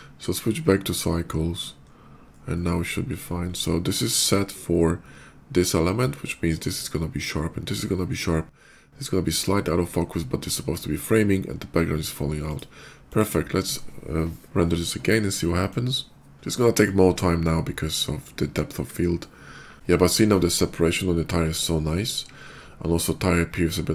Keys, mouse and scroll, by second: 1.5 middle click, 1.6 middle click, 1.9 middle click, 2.3 middle click, 2.7 middle click, 3.1 middle click, 12.2 click, 12.8 click, 15.5 click.